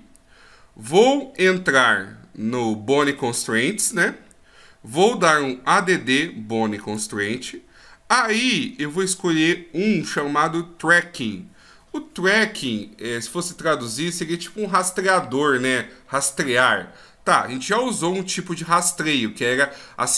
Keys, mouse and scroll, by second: 1.3 click, 6.8 click.